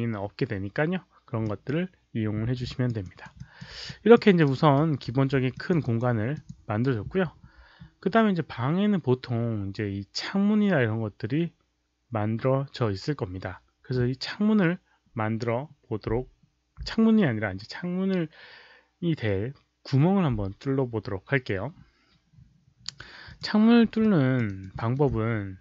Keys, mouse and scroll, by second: 1.4 click, 2.6 alt+click, 2.6 z, 2.9 alt+right click, 3.3 alt+click, 3.8 click, 4.9 f, 5.4 alt+click, 5.7 alt+right click, 6.3 click, 6.5 5, 23.2 click, 23.9 alt+click, 24.4 alt+right click, 24.7 alt+middle click.